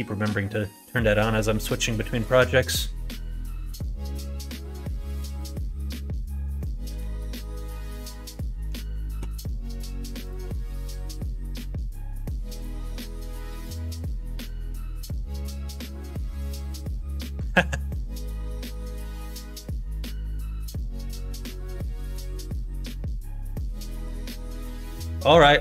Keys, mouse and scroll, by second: 2.2-4.1 drag, 10.2-12.6 drag, 13.6 click, 15.2-25.6 drag.